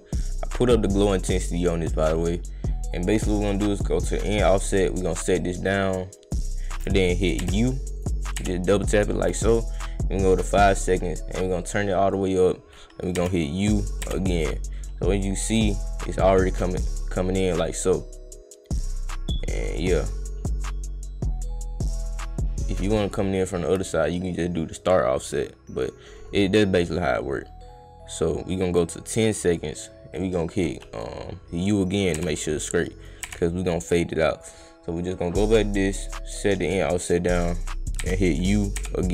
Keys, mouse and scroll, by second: 3.7 click, 4.8-6.3 drag, 8.0 click, 9.0-10.3 drag, 11.5 click, 13.8 click, 14.7-16.8 drag, 19.8-22.8 drag, 26.4-29.3 drag, 30.9 click, 33.0 click, 33.7 click, 35.7 click, 38.6 click.